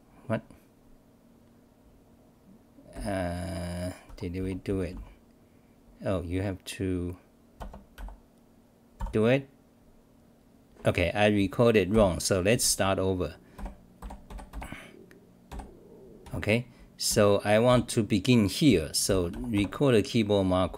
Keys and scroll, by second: 2.9 f, 4.1 Home, 4.4 c, 4.9 n, 8.7-9.4 typing, 11.9 f, 14.3 f, 14.5 f, 15.5 f, 16.2 Home, 17.1 d, 17.7 v.